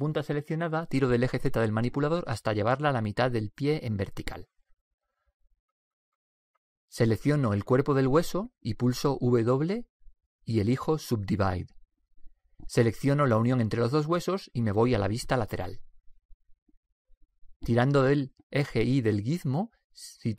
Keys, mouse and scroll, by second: 1.3-3.1 drag, 3.2 click, 8.1-9.7 right drag, 9.7 click, 9.8 w, 13.8 right click, 16.5 KP_3, 18.9-20.3 drag.